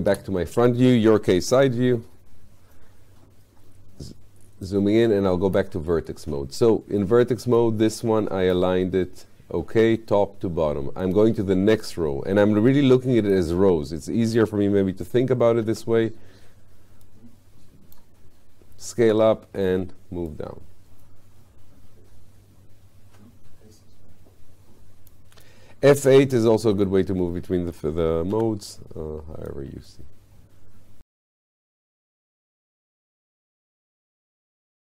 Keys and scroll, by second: 0.1 space, 15.6 r, 19.0 w, 28.3 r.